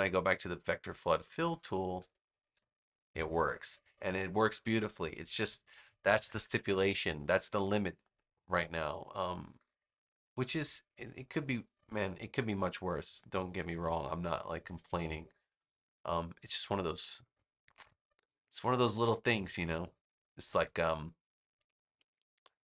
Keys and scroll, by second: 1.1 space, 6.1 super+-.